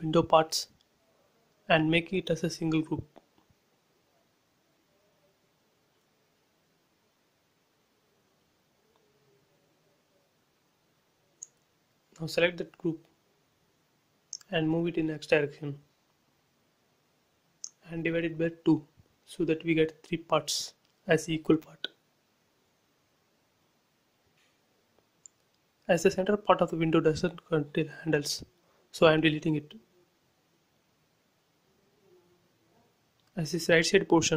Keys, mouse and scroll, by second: 0.5 scroll down 1, 1.6 scroll up 1, 2.1 shift+click, 4.0 scroll down 1, 4.5 middle click, 5.2 click, 6.4 scroll up 1, 8.0 shift+click, 8.6 right click, 9.6 click, 9.9 scroll down 1, 11.5 click, 12.2 click, 12.6 middle click, 13.6 scroll up 1, 13.9 middle click, 14.5 scroll up 1, 14.8 m, 15.5 ctrl+click, 16.1 scroll down 1, 16.9 Right, 18.7 click, 20.4-21.5 typing, 21.1 Return, 22.2 scroll up 1, 23.0 click, 25.8 scroll up 1, 27.0 click, 28.1 Delete, 28.6-29.4 scroll down 1, 30.2 click, 30.8 middle click, 31.2 scroll up 1, 31.5 shift+middle click, 32.1 scroll up 1, 32.9 click.